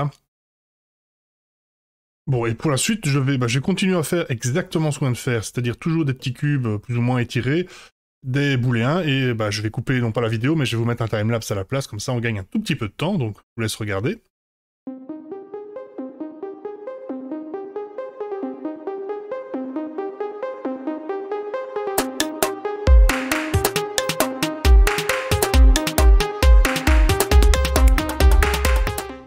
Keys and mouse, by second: 0.9 F5, 3.6-4.4 middle drag, 4.9 middle drag, 6.1 middle drag, 8.6-9.0 middle drag, 11.3-11.7 middle drag, 12.3-12.7 middle drag, 14.6 F5, 14.7 KP_7, 14.7 KP_1, 14.9 shift+a, 15.3 s, 16.6 middle click, 16.9-19.2 typing, 18.6 middle click, 19.0 Tab, 19.0 middle click, 19.3 middle click, 19.8 middle click, 19.9 ctrl+b, 20.1 ctrl+z, 20.3 Tab, 20.3 ctrl+a, 20.5 Tab, 20.6 ctrl+b, 21.1 Tab, 21.8 middle drag, 23.3 middle click, 24.3 click, 25.2 middle click, 25.6 middle click, 25.8 g, 26.6-27.0 middle drag, 27.1 middle click, 27.2 g, 27.7 middle click, 27.9 middle click, 28.5 middle click, 28.7 click, 29.0 middle click, 29.1 click.